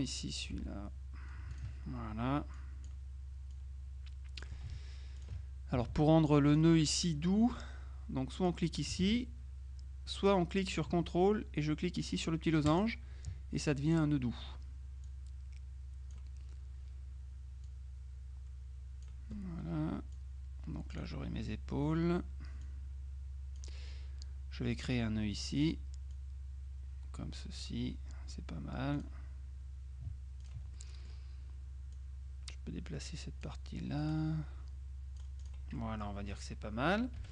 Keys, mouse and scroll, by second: 0.1 click, 0.6 Delete, 1.6 ctrl+click, 2.6 click, 3.6 click, 5.3 ctrl+click, 6.0 z, 6.6 click, 8.4 click, 9.1 ctrl+z, 12.8 ctrl+click, 15.1-16.7 drag, 17.7-19.6 drag, 20.2 click, 22.7-24.2 drag, 25.5 click, 29.0 click, 30.5 ctrl+click, 30.8 ctrl+middle click, 32.0-34.0 drag, 35.8 click.